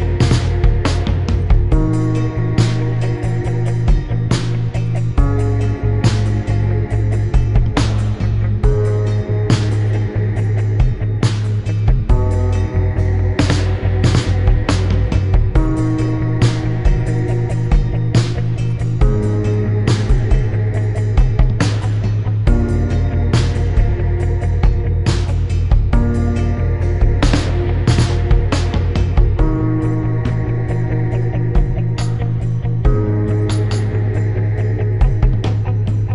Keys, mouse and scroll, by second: 2.0 click, 3.1 click, 4.1 click, 5.5 click, 6.1 click, 7.6 click, 8.7 click, 9.4 click, 10.5 click, 10.8 click, 12.4 click, 14.0 click, 14.9 click, 16.3 click, 17.1 ctrl+z, 17.4 click, 19.1 click, 20.1 click, 21.5 ctrl+z, 22.2 click, 24.6 right click, 25.7 right click, 26.9 click, 27.4 right click, 31.1 click, 31.7 click, 33.2 click, 34.2 ctrl+z, 35.2 click.